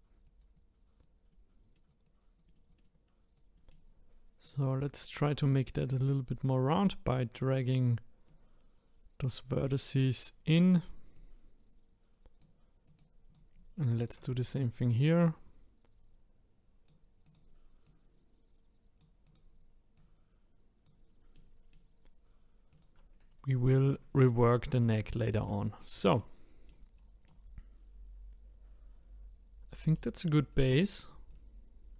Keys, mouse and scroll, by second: 0.2-1.3 drag, 1.3 middle click, 1.8 click, 2.8 middle click, 2.9 click, 3.5-5.1 middle drag, 5.1 click, 5.8 middle click, 6.4 click, 7.4 middle click, 8.3 click, 9.6-10.6 middle drag, 10.6 click, 11.1 click, 12.9 click, 13.3 click, 14.0 shift+click, 15.0 click, 17.2 click, 17.8 click, 19.2 click, 19.9 click, 21.3-22.7 middle drag, 22.7 click, 25.1 shift+middle click, 25.7-26.2 scroll down 1, 26.2 middle click, 26.9 scroll down 1, 27.3-30.3 middle drag, 30.5 click, 31.3 click.